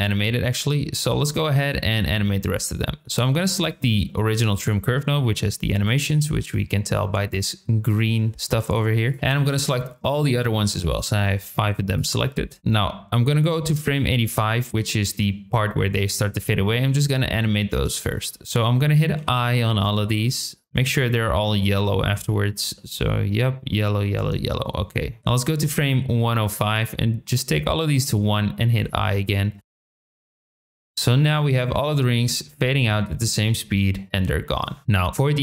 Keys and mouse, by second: 4.1 shift+middle drag, 8.5 shift+middle drag, 9.4 shift+click, 10.2 shift+middle click, 10.8 shift+click, 11.2 shift+middle click, 11.9 shift+click, 12.7-14.0 drag, 17.5 shift+middle click, 19.6 middle drag, 19.6 i, 20.7-21.0 middle drag, 20.7 i, 21.3 middle click, 22.1 i, 22.8 middle click, 23.8 middle click, 24.4 middle click, 25.2 click, 26.3 middle click, 27.4 click, 29.2 middle click, 29.6 click, 29.7 i, 29.8 middle click, 29.8 click, 29.9 middle drag, 30.1 click, 30.2 i, 30.3 click, 30.5 click, 30.6 i, 30.7 middle click, 30.9-35.1 drag.